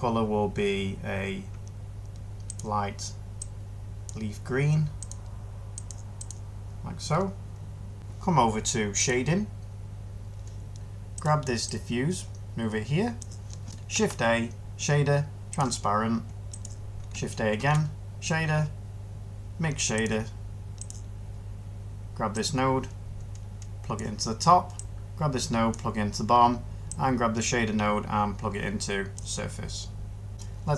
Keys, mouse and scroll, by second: 13.8 a, 17.4 a.